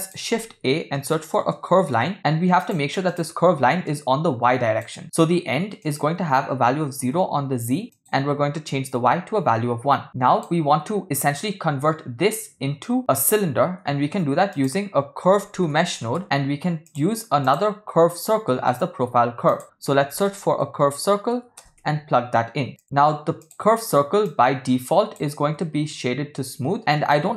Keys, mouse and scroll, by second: 3.9-4.9 drag, 5.8-7.1 drag, 8.0-9.0 drag, 10.0 click, 14.1 shift+a, 18.5 middle click, 19.0 shift+a, 24.3-25.3 drag, 26.5-26.9 ctrl+middle drag, 27.1-27.3 shift+middle drag.